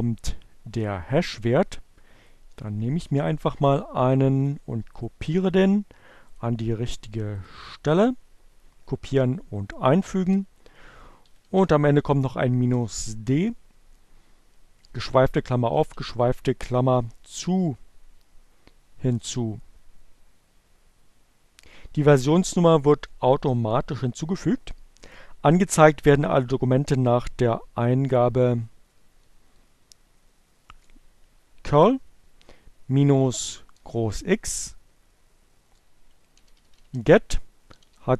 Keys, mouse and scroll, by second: 2.0-4.0 drag, 4.7 right click, 5.8 click, 6.5 click, 7.3 right click, 8.7 click, 9.9 d, 12.3 space, 12.6 alt+7, 14.9 alt+0, 17.4 Return, 27.6 Up, 28.2 BackSpace, 32.8 BackSpace, 37.0-38.1 typing.